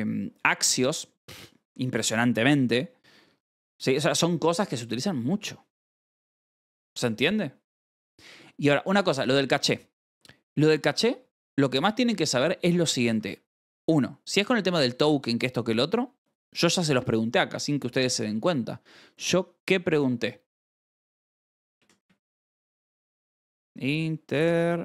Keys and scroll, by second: 0.5 v, 1.6 Escape, 2.3 j, 8.0 k, 13.0 shift+g, 13.7 k, 20.7-24.8 typing.